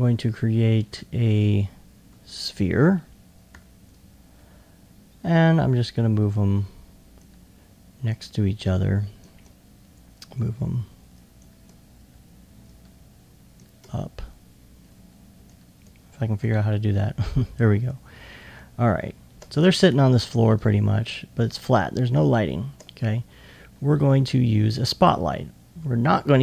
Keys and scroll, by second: 3.5 e.